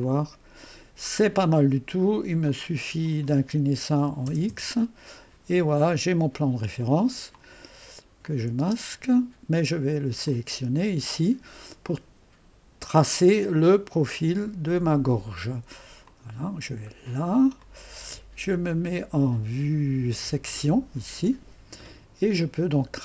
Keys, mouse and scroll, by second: 0.0 click, 2.5 click, 4.0-4.8 typing, 6.3-6.9 scroll down 1, 6.3-6.9 typing, 7.4 click, 8.3 click, 8.6-9.5 typing, 10.2 click, 16.0 click, 16.9-19.3 scroll up 2, 20.2 click.